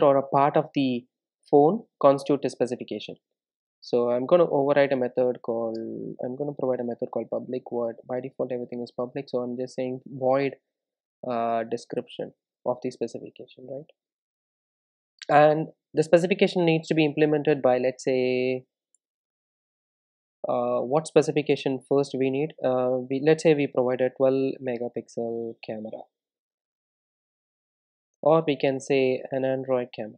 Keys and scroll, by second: 5.2 Return.